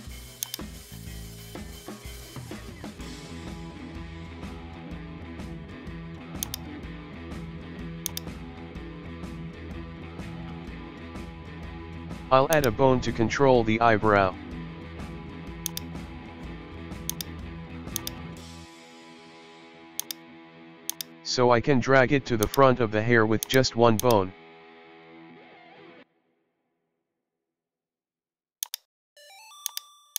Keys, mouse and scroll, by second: 0.4 click, 1.0-2.5 middle drag, 3.6 alt+g, 4.0 KP_1, 5.3-6.4 scroll down 1, 6.4 click, 6.7 Tab, 7.1 Tab, 7.4 shift+middle click, 8.1 right click, 8.4 scroll up 1, 8.6 Tab, 8.9-10.2 middle drag, 10.2 shift+d, 12.8-13.8 middle drag, 14.6-15.7 middle drag, 15.7 click, 16.3-17.1 middle drag, 17.1 click, 17.3 middle click, 18.0-18.7 drag, 18.7-20.0 middle drag, 20.0-22.4 drag, 22.4 right click, 23.4 click, 24.0 click, 24.6 KP_1, 24.9 Tab, 25.3 shift+middle click, 26.3 scroll down 1, 26.5-27.0 shift+middle drag, 27.0 scroll down 1, 27.2 shift+middle click, 27.4-28.5 scroll up 1, 28.5 scroll up 1, 28.7 right click, 29.2 g.